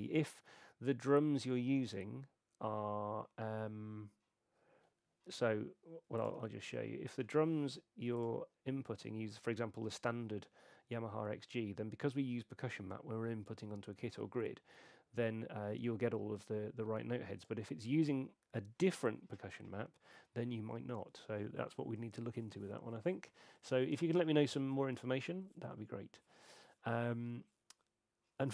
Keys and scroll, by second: 6.6 super+,.